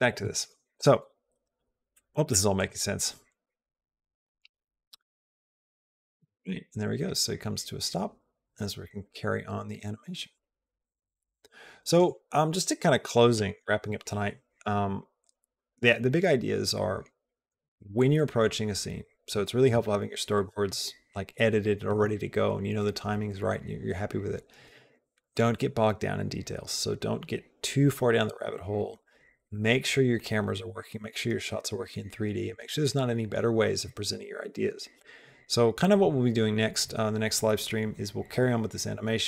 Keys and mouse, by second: 3.1-11.8 drag.